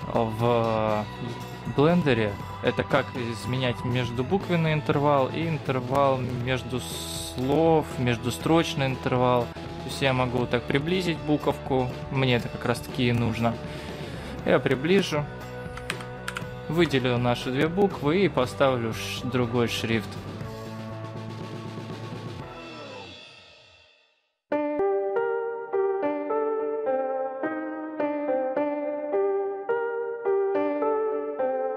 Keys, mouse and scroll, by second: 16.2 Left, 18.1-19.0 scroll up 3, 19.2 click, 25.9 Tab, 27.6 Tab, 28.0-28.7 scroll down 7, 29.4-30.5 scroll down 4, 30.5 click, 30.7 click, 31.3 click.